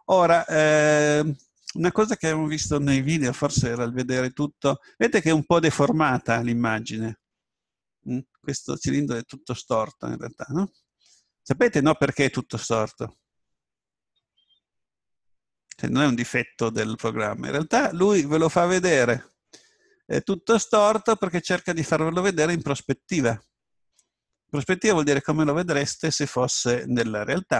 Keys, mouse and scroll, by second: 9.0-11.2 middle drag, 22.3-25.2 scroll down 1, 26.1-27.5 middle drag.